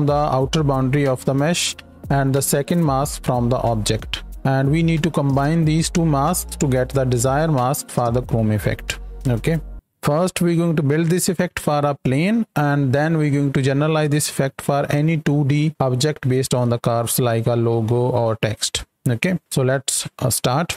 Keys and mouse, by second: 10.0-10.6 drag, 12.0 click, 13.6 space, 14.3 KP_7, 14.5 shift+middle click, 15.0-16.1 right drag, 16.1 space, 16.4-16.8 drag, 17.0 ctrl+space, 20.2 space, 20.4 click.